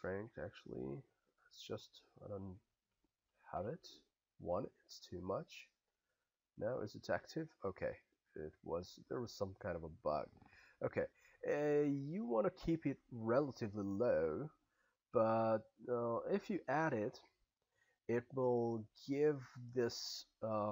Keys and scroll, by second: 2.9 1, 3.6 Return.